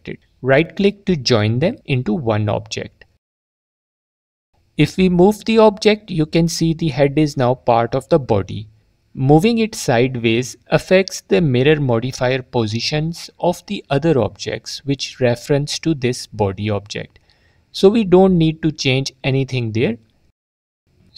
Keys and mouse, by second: 1.2-2.4 drag, 6.6 ctrl+z, 11.3 ctrl+z, 12.1 click, 12.5 click.